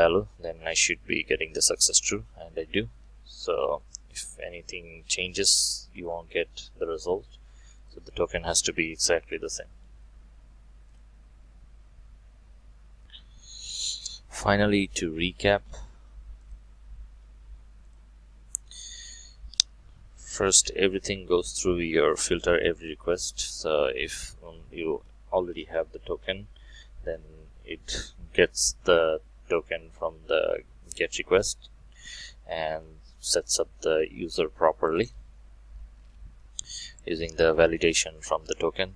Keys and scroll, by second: 20.6 alt+1, 35.1 ctrl+shift+F12.